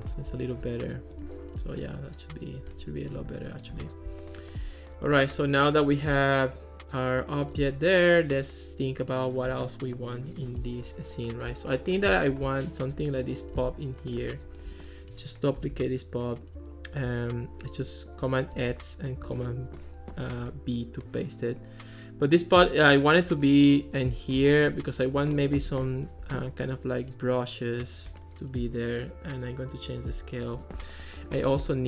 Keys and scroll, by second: 15.6 super+d, 18.6 super+x, 19.3 super+v.